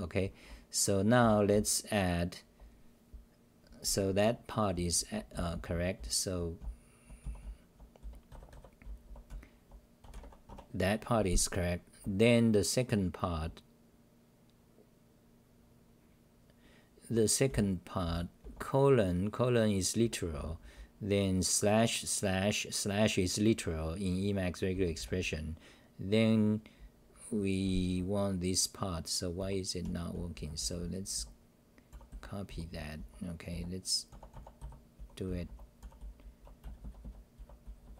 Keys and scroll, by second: 0.0-11.5 typing, 10.5 Home, 18.0 h, 20.3 n, 27.6 h, 27.8 h, 29.1-37.9 typing.